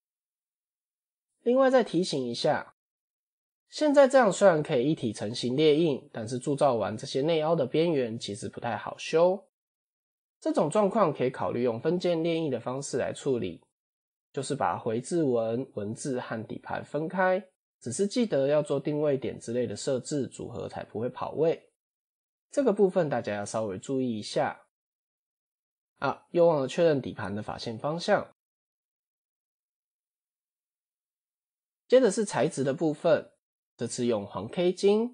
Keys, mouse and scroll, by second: 1.1-1.7 middle drag, 1.7-2.1 scroll down 3, 2.1-2.6 middle drag, 2.6-3.1 scroll up 3, 3.1-3.6 middle drag, 3.6 scroll down 1, 4.6 middle click, 5.3 scroll up 1, 14.4 click, 14.8 click, 15.3 click, 18.4-19.0 middle drag, 21.9-22.5 middle drag, 24.1 KP_7, 24.9-25.4 scroll down 3, 25.8 click, 26.4 Tab, 26.8 a, 28.1 shift+n, 29.0 Tab, 29.8 click, 32.9 click, 33.6 click.